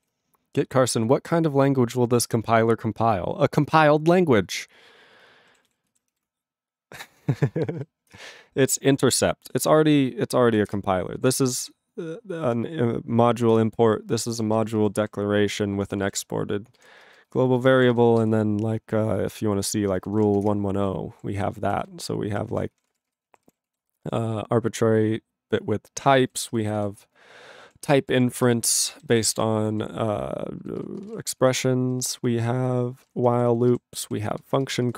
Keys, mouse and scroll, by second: 0.0 ctrl+s, 5.7 ctrl+s, 8.1 ctrl+Return, 10.7 ctrl+Return, 13.6 ctrl+Return, 14.1 ctrl+p, 14.3 ctrl+p, 14.4 ctrl+space, 14.5 ctrl+n, 14.6 ctrl+n, 14.8 ctrl+n, 15.0 ctrl+g, 15.7 ctrl+p, 15.9 ctrl+space, 16.0 ctrl+e, 16.8 ctrl+g, 16.9 ctrl+space, 17.4 ctrl+alt+b, 17.6 ctrl+alt+b, 17.9 ctrl+g, 20.7 ctrl+Return, 21.2 ctrl+=, 21.7 ctrl+=, 21.9 ctrl+n, 22.4 ctrl+n, 22.7 ctrl+p, 22.9 ctrl+space, 22.9 ctrl+e, 23.1 ctrl+g, 23.3 ctrl+=, 23.7 ctrl+a, 23.8 ctrl+space, 23.9 ctrl+n, 26.2 ctrl+n, 26.3 ctrl+g, 26.4 ctrl+space, 26.5 ctrl+n, 26.6 ctrl+n, 26.9 ctrl+n, 27.6 ctrl+p, 27.8 ctrl+p, 28.1 ctrl+e, 28.4 ctrl+g, 28.9 ctrl+b, 29.1 ctrl+b, 29.3 ctrl+space, 29.3 ctrl+e, 29.7 ctrl+g, 30.6 ctrl+b, 30.8 ctrl+b, 31.0 ctrl+space, 31.0 ctrl+e, 31.1 ctrl+g, 31.4 ctrl+n, 31.6 ctrl+n, 32.2 ctrl+p, 32.3 ctrl+p, 33.0 ctrl+space, 33.0 ctrl+e, 33.0 ctrl+n, 33.2 ctrl+n, 33.7 ctrl+g, 34.0 ctrl+p, 34.2 ctrl+p, 34.4 ctrl+f, 34.5 ctrl+space.